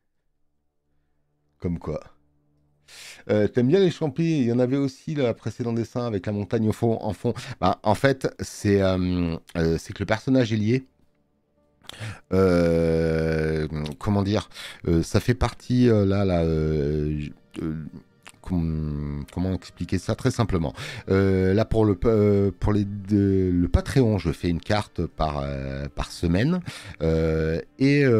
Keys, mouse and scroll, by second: 21.2 space, 21.4 click.